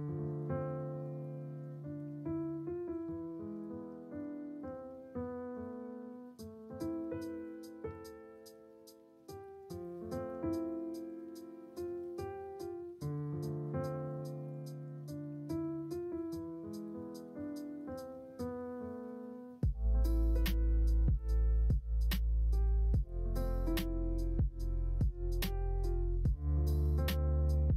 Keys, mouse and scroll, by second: 0.2 shift+click, 1.0 click, 2.2 click, 3.0 click, 3.9 g, 5.5 click, 5.6 g, 7.0 g, 9.8 click, 10.3 2, 10.6 click, 11.0 shift+click, 11.9 e, 14.4 click, 14.9 g, 19.7 e, 22.3 click, 23.8 click, 26.7 g.